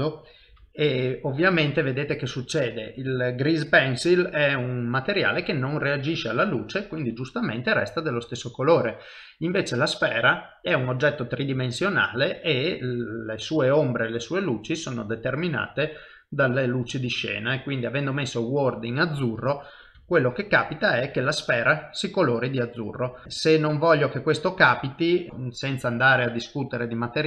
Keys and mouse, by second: 20.0 KP_0, 20.5 middle click, 21.2 shift+middle click, 21.9 ctrl+middle click, 22.3 middle click, 23.2 shift+middle click, 23.2 middle click, 23.5 shift+middle click, 24.5 click, 25.3 click.